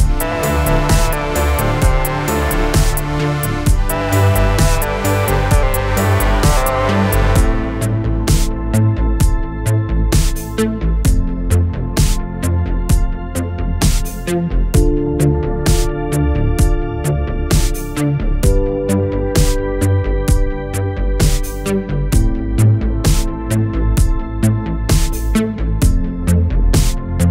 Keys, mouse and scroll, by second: 3.9 click, 8.2 click, 15.1 click, 26.5 click.